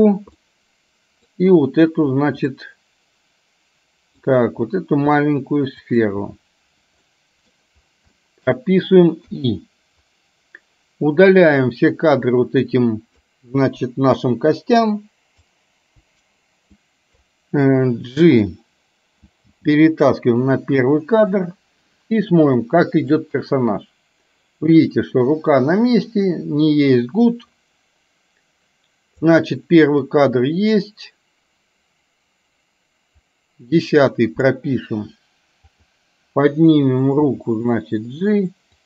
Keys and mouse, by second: 0.5 middle click, 2.5-4.3 middle drag, 5.8 shift+click, 7.1 middle click, 8.2 middle click, 11.6-13.3 drag, 13.8 Delete, 14.8 click, 16.1 Delete, 16.8 click, 19.6 g, 22.6 click, 23.2-29.5 drag, 30.2-34.7 drag, 35.6 click, 37.5 g.